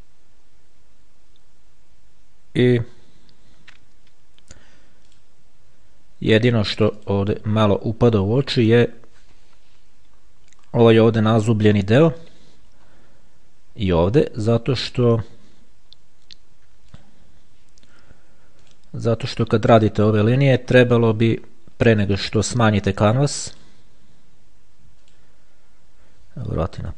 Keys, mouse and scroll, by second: 5.4 click, 7.2 click, 10.4-11.0 ctrl+scroll up 2, 11.0-11.4 ctrl+scroll up 1, 15.0-15.6 scroll down 2, 17.2 click, 18.8 click, 20.2-20.6 ctrl+scroll up 2, 20.6-22.2 ctrl+scroll down 1, 23.8 click, 25.2 click.